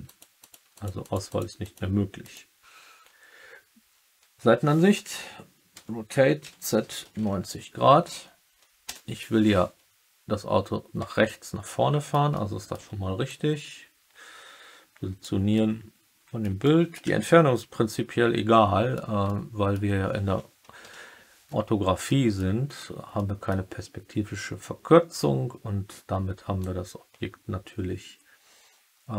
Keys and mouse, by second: 0.0 click, 0.3 click, 0.7 drag, 0.9 drag, 1.2 click, 1.5 click, 2.1 click, 5.7 r, 6.3 z, 6.9 9, 7.1 0, 9.3 Return, 11.2-12.0 alt+middle drag, 12.3-12.7 alt+middle drag, 13.3-15.1 drag, 15.5-16.3 alt+middle drag, 16.6 middle click, 17.2-18.9 alt+middle drag, 19.2-19.7 middle drag, 20.7 KP_1, 22.0 middle drag, 23.1-23.4 middle drag, 26.5-29.1 drag.